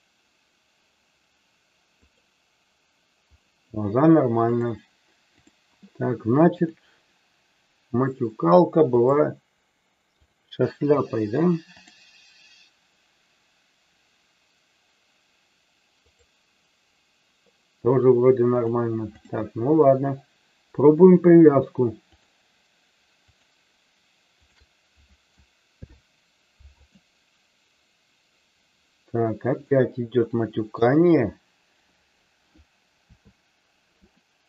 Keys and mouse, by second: 4.4-5.4 drag, 6.5 click, 8.9-10.4 drag, 11.8-16.3 drag, 18.5 click, 23.1 shift+click, 25.7 ctrl+p, 29.7-30.7 middle drag, 32.9 KP_3, 34.2-34.4 shift+middle drag.